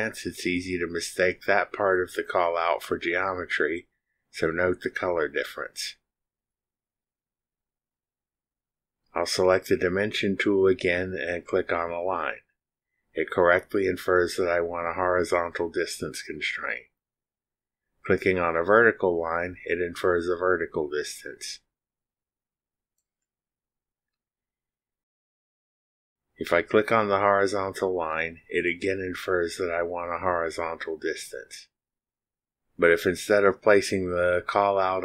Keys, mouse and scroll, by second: 9.9 click, 11.7 click, 13.6 click, 15.5 click, 19.9 click, 23.9 click, 25.4 click, 28.7 ctrl+click.